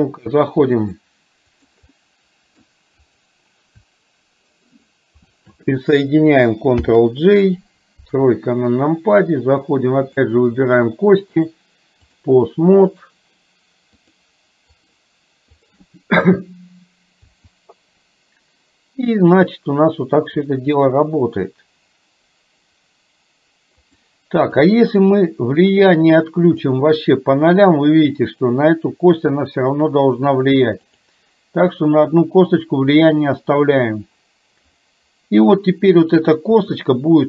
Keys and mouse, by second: 0.9 click, 2.0 middle click, 3.2 click, 5.3 shift+click, 6.8 ctrl+j, 8.0 KP_3, 10.2 click, 11.4 click, 14.2 click, 15.5 click, 17.4 r, 36.5 r.